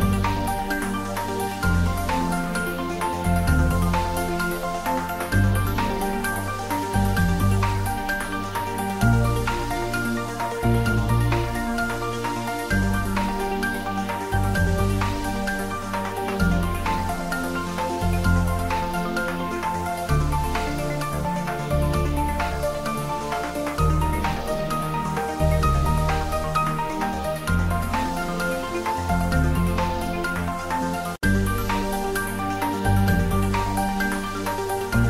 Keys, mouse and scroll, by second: 1.5 g, 3.2 click, 3.9-5.3 ctrl+middle drag, 5.9 g, 7.6 Down, 7.8 click, 8.4 middle click, 8.8 click, 9.6-10.5 typing, 11.0 click, 12.8 ctrl+middle click, 13.3 click, 13.6 middle click, 14.6 click, 15.0 ctrl+middle click, 15.2-16.1 typing, 17.2 click, 17.4-18.3 typing, 18.8 click, 18.9 ctrl+middle click, 19.3 shift+middle click, 19.7 ctrl+middle click, 20.1-22.0 typing, 21.0 click, 22.3 click, 23.3 ctrl+middle click, 24.7 g, 25.0 Right, 26.0 Return, 26.2 Tab, 26.9 2, 27.7 shift+click, 28.3 click, 28.6 shift+click, 29.2 shift+click, 30.3 shift+click, 30.7 middle click, 31.7 ctrl+z, 32.3 click, 34.7 shift+click.